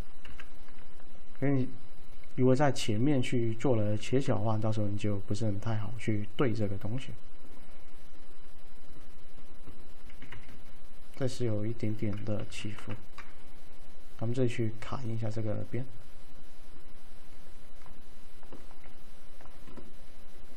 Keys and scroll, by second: 0.4 F3, 4.0 alt+e, 10.4 s, 12.5 v, 12.9 F3.